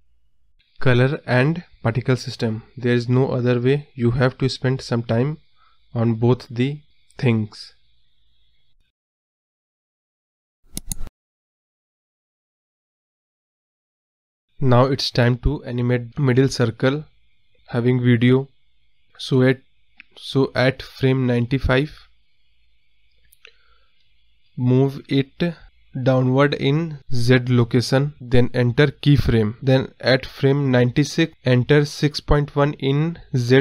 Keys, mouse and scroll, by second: 1.5 ctrl+z, 1.7 ctrl+z, 2.3 click, 3.1 ctrl+z, 5.4 click, 5.7 click, 5.9 ctrl+z, 6.0 scroll down 1, 6.1-6.4 middle drag, 6.4 scroll up 2, 6.5 click, 7.0 click, 7.5 scroll up 1, 7.8 middle click, 8.0-8.5 scroll down 2, 9.6 click, 11.0 middle click, 11.3 KP_0, 11.4-11.9 scroll up 5, 11.9-12.4 scroll down 3, 13.0 space, 13.3-14.2 scroll up 2, 15.5 space, 15.8 click, 16.3-17.6 drag, 20.0-21.1 scroll down 1, 21.1 scroll down 1, 21.8-22.2 scroll down 4, 22.2 scroll up 1, 24.8 click, 27.8 click, 29.4 Right, 31.5-32.3 drag, 32.8 click, 33.2 space.